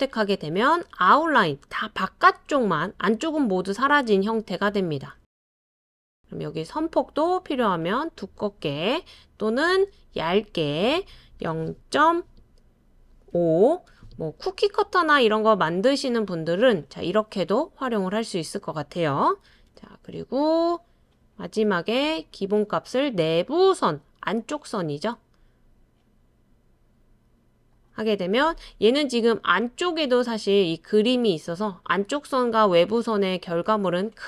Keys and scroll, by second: 11.4-12.0 typing, 13.3 typing, 13.9 Return, 15.7 typing, 19.4 super+c, 19.7 super+v.